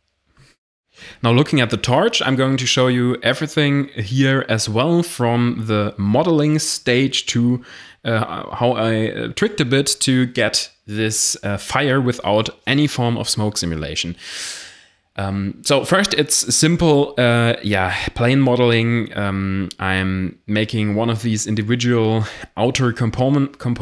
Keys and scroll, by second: 3.5 n, 3.6 w, 3.6 Return, 4.0 1, 4.6 shift+a, 8.4-17.1 typing, 14.0 Tab, 18.6 ctrl+r, 19.6 g, 19.6 y, 19.8 x, 20.2 Tab, 22.6 7, 23.7 shift+d.